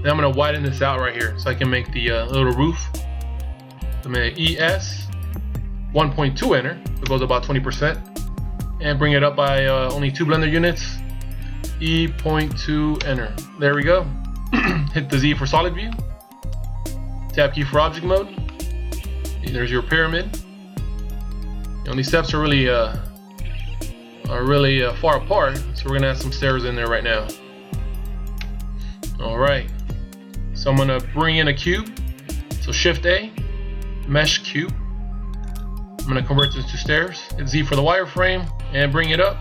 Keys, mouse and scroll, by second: 4.1 e, 11.4 e, 13.5 middle click, 15.3 z, 15.6 middle click, 17.8 Tab, 18.3 middle click, 22.3 middle click, 25.4 scroll down 2, 26.3 middle click, 28.2 KP_1, 32.8 shift+a, 37.4 z, 38.3 click.